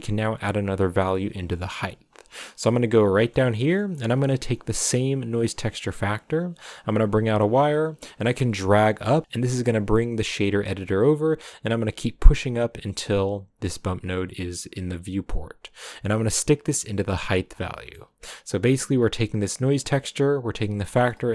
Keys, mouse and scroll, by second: 0.0 click, 2.3-4.0 middle drag, 4.0 scroll up 5, 4.6 scroll up 1, 6.2-17.0 drag, 17.7-18.3 scroll down 8, 18.3-21.0 middle drag, 21.0 scroll up 2.